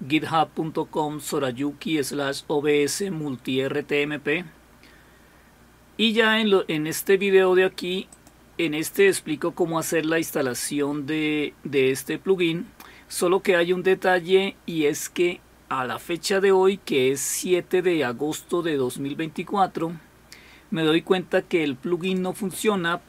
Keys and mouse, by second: 8.1 click, 22.0 click.